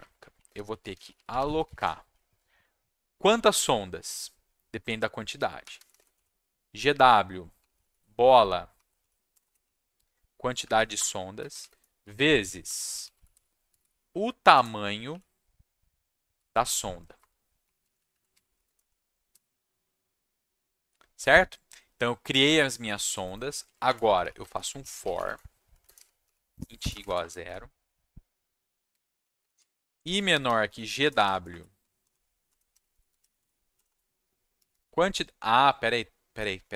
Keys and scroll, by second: 0.0-2.1 typing, 5.4-9.6 typing, 10.5 Down, 10.6 Down, 10.7 Down, 10.9 Return, 11.4-14.5 typing, 15.1 Left, 16.1-17.1 typing, 17.1 Return, 17.8 Left, 17.9 Left, 18.1 Left, 18.5 Right, 18.6 space, 18.7 Right, 19.3 /, 23.8-27.4 typing, 28.6-35.2 typing.